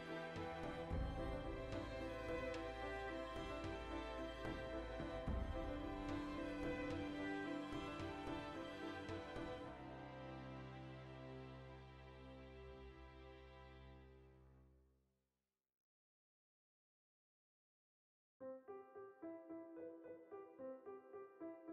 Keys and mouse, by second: 0.2 right click, 0.4-2.0 middle drag, 1.6 g, 2.2-7.7 middle drag, 7.6 Tab, 7.7 right click, 8.2 h, 8.5 right click, 8.6 h, 8.8 right click, 9.0 h, 9.1 right click, 9.2 h, 9.5 right click, 9.8 Tab, 10.0 middle click, 10.8 right click, 11.2 middle click, 11.4 right click, 11.6-12.9 middle drag, 12.9 right click, 13.1-14.3 shift+middle drag, 14.2 g, 14.8 click, 14.8-19.4 middle drag, 19.4 right click, 19.8 g, 20.9 click, 20.9 middle click, 21.6 right click.